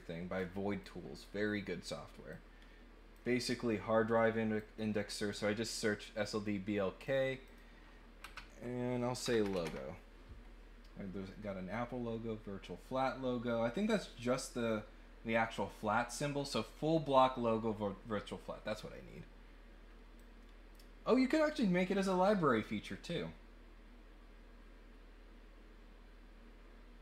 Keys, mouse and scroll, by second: 0.8 click, 2.3 click, 4.5 click, 7.0 click, 7.4 click, 20.1 click.